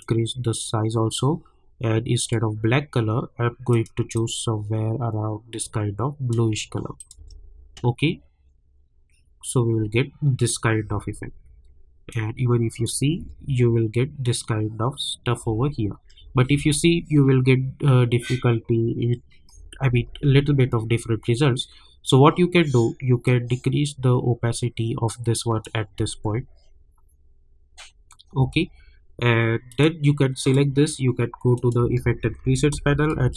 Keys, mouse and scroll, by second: 1.5-2.2 scroll down 1, 2.2-7.0 drag, 7.3 space, 10.8 space, 11.3 scroll up 1, 12.1 click, 13.2 space, 15.4 space, 19.5 space, 21.2 scroll down 1, 23.2-25.9 drag, 25.9 space, 28.3 space, 28.6 scroll up 1, 29.7 click, 31.9 ctrl+a, 32.2-33.3 typing.